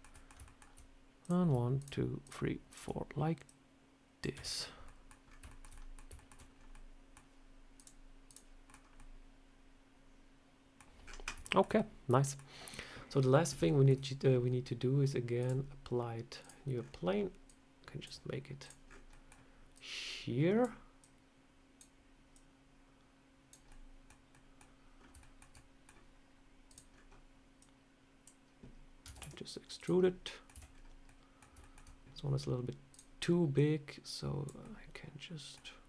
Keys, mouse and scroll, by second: 0.0 middle click, 0.3 shift+middle click, 1.1 click, 1.6 shift+click, 3.3 shift+click, 4.2 Tab, 4.3 scroll down 4, 4.7 middle click, 5.1 scroll down 2, 5.4 shift+middle click, 5.6 middle click, 6.0 shift+middle click, 6.4 scroll down 2, 6.6 middle click, 7.6 click, 8.5 scroll down 3, 8.5 middle click, 8.8 scroll up 1, 8.8 middle click, 10.9 scroll up 8, 11.3 shift+middle click, 11.6 middle click, 13.5 shift+middle click, 15.3 click, 16.6 scroll down 5, 17.3 click, 18.5 click, 18.7-19.0 scroll up 5, 18.9 middle click, 19.6 click, 20.9 click, 22.2 click, 23.5 middle click, 24.2 middle click, 24.8 scroll up 3, 25.0 shift+middle click, 25.1 shift+middle click, 25.4 middle click, 25.7 scroll down 1, 26.5 click, 26.8 scroll up 1, 27.4 click, 28.9 Tab, 29.0 e, 29.9 middle click, 30.4 a, 30.5 scroll down 3, 30.9 middle click, 31.5 shift+middle click, 32.8 click, 33.4 click, 34.5 middle click.